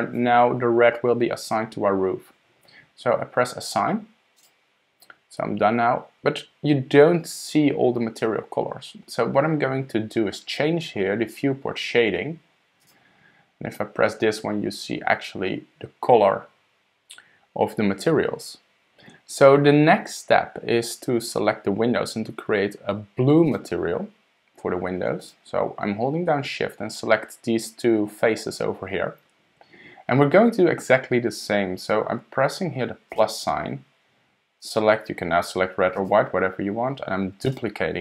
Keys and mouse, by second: 4.4 click, 13.4-23.5 drag, 25.2 shift+click, 33.1 click, 34.7-36.1 drag, 37.5 click.